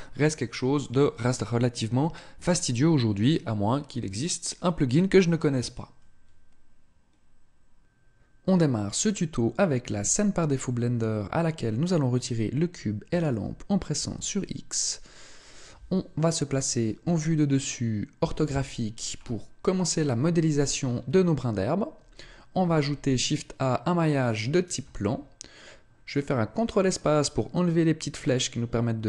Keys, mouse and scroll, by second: 13.1 shift+right click, 14.0 x, 17.0 KP_7, 18.2 KP_5, 19.2-19.8 scroll up 5, 20.4-21.8 scroll up 1, 22.6 shift+a.